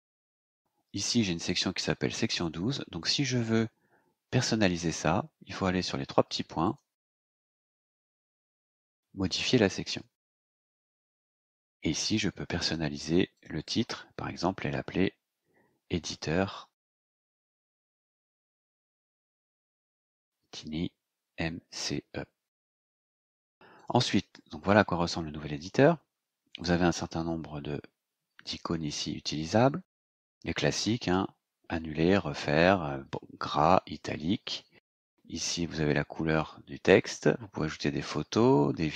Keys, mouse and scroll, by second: 6.6 click, 9.4 click, 12.5 click, 13.3 click, 16.2-22.4 typing, 23.7 click, 34.9 click.